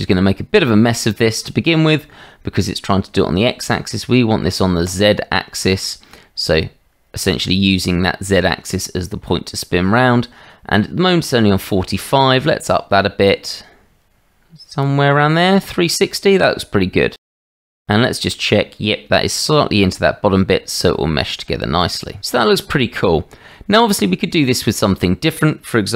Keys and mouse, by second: 4.8 click, 12.3-14.9 drag, 20.9-21.2 shift+drag, 21.8 click, 24.8 middle click.